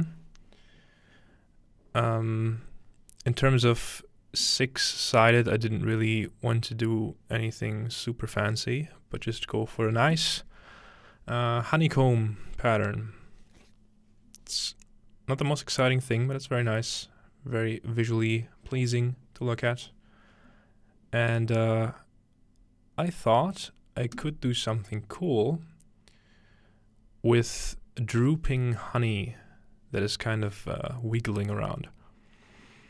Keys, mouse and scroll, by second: 15.4-17.3 drag, 24.2-26.1 drag.